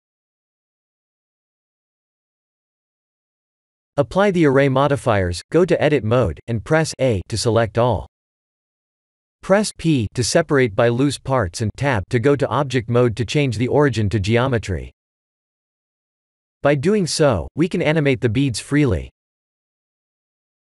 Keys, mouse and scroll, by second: 0.5 middle click, 3.3 click, 4.4-5.9 scroll up 10, 5.5 click, 5.9 click, 8.6 Tab, 8.9 a, 9.8 p, 13.2 Tab, 15.0 click, 17.9 click, 19.0 middle click, 20.4 KP_1.